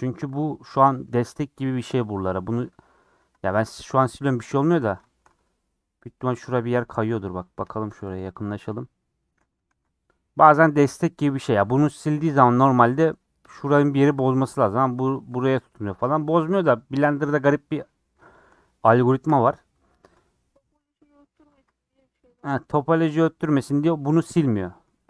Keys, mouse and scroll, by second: 1.2 scroll down 3, 3.6 ctrl+x, 4.1 middle click, 4.6 ctrl+z, 5.0 middle click, 5.2-6.0 scroll up 5, 6.0 middle click, 6.9 KP_Decimal, 7.3-8.3 scroll up 4, 7.7 shift+middle click, 8.3-9.6 middle drag, 9.6 ctrl+x, 12.6 ctrl+z, 14.9 1, 15.0 click, 16.7-17.1 scroll down 5, 17.2-18.5 middle drag, 18.5 scroll up 3, 20.0-20.5 scroll down 5, 20.5-22.8 scroll up 4.